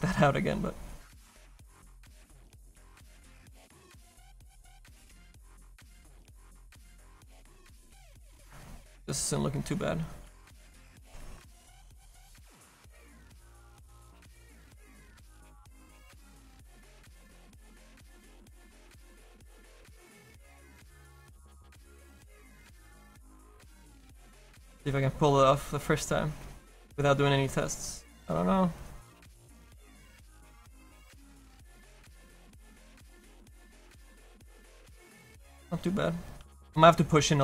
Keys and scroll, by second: 1.2 s, 1.8 s, 10.4 s, 11.8 s.